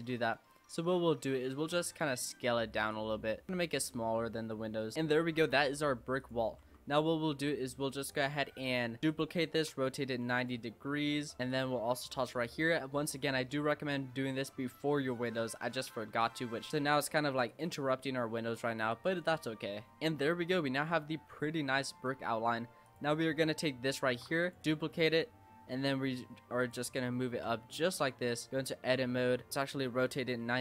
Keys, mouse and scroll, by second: 0.0 a, 0.9 s, 3.0-4.1 middle drag, 4.1 s, 6.2 click, 6.6 Tab, 8.1 click, 9.0 shift+d, 9.6 r, 10.7 middle click, 11.5 click, 13.5-16.1 middle drag, 16.1 a, 16.6 shift+d, 16.7 r, 17.8-18.9 middle drag, 18.9 click, 19.9 middle drag, 20.8-21.5 scroll down 3, 21.5-22.4 shift+middle drag, 22.4-22.8 scroll down 2, 22.8 click, 24.1 shift+d, 25.1 click, 25.7 g, 27.0-27.5 shift+middle drag, 27.5-27.9 scroll up 3, 27.9 Tab, 28.4 a, 28.5-29.5 middle drag, 29.5 r.